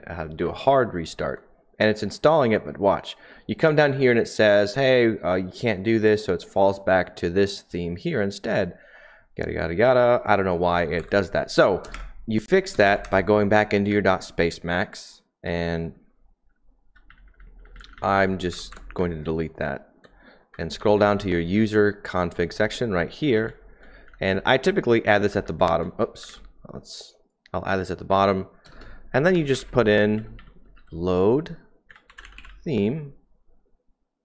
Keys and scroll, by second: 11.0-13.8 typing, 15.3-20.4 typing, 20.4 Page_Down, 20.6 Page_Down, 20.7-21.1 Page_Down, 21.5 Page_Down, 22.3-26.6 typing, 28.0-30.8 typing, 31.8-32.4 typing.